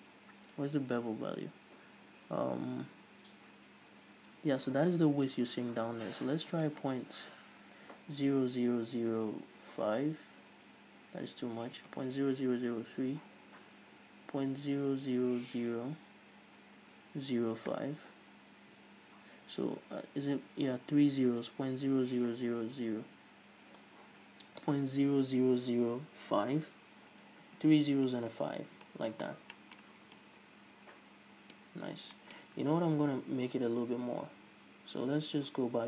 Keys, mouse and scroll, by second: 28.5 scroll down 1, 28.8 Tab, 29.0-29.4 middle drag, 29.4 scroll down 1, 29.7 middle click, 30.1 a, 30.3-31.8 middle drag, 31.8-32.3 scroll up 2, 32.3 middle drag, 32.5-34.9 scroll up 2, 34.9 ctrl+z.